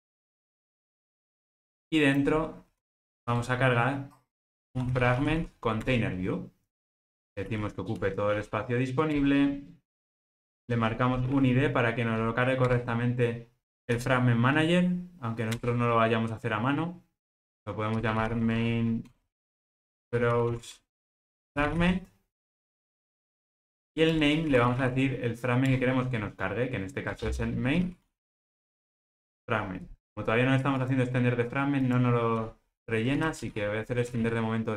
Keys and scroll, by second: 6.0 Return, 12.7 Return, 15.6 Return, 25.8 Return, 29.0 Return, 29.1 ctrl+space.